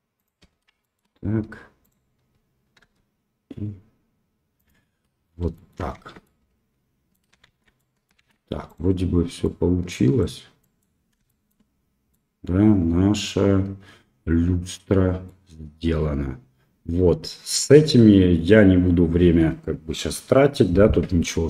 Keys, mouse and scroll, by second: 0.8 shift+middle click, 1.8 click, 2.8 r, 5.5 shift+middle click, 5.9 Tab, 6.2-7.1 middle drag, 7.4 shift+z, 7.7 middle drag, 8.6 click, 9.4-10.2 middle drag, 10.6 middle drag, 11.2 shift+middle drag, 12.1-15.2 middle drag, 17.5 click.